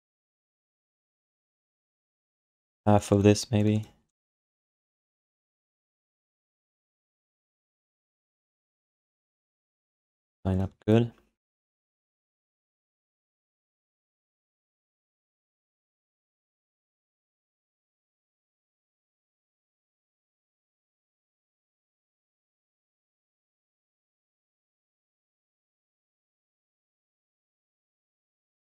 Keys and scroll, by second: 1.5 q, 6.8 alt+shift+d, 10.7 w.